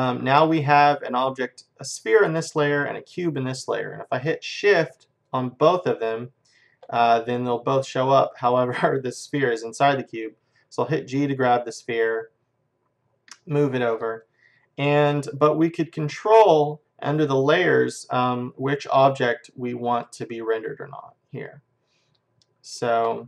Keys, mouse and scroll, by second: 5.3-7.2 drag, 7.6-9.5 middle drag, 11.0 g, 14.2-16.2 middle drag, 18.3-21.8 drag, 22.7-23.2 drag.